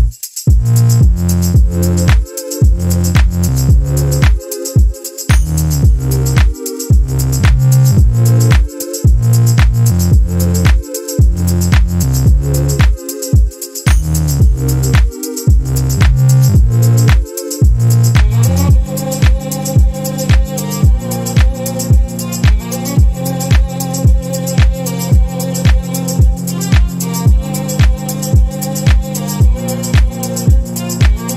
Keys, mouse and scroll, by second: 1.6 click, 2.6-4.7 drag, 6.7 click, 7.1 space, 7.8 click, 8.5 click, 9.8-11.6 ctrl+drag, 12.6 click, 13.4 click, 15.2 click, 17.0 click, 17.6 click, 18.3 click, 19.6 shift+click, 20.3-23.3 ctrl+shift+drag, 23.5 ctrl+click, 24.6 KP_5, 26.1 click, 27.7 ctrl+s.